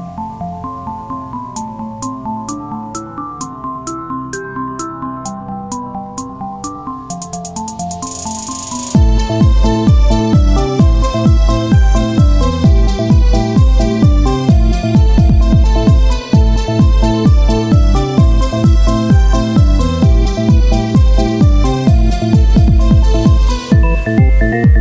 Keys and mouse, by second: 6.3 Tab, 6.3 ctrl+r, 7.6 Tab, 11.0 z, 12.3 c, 13.2 z, 15.1 Tab, 21.5 click, 22.3 KP_1, 23.3 click, 23.9 z, 24.7 click, 24.7 z.